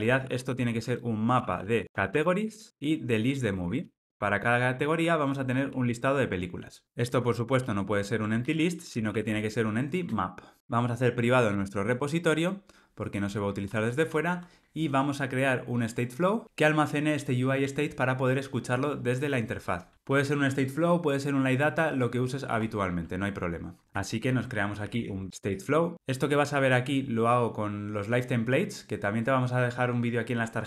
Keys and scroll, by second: 6.8 alt+Return, 10.0 Return, 10.6 alt+Return.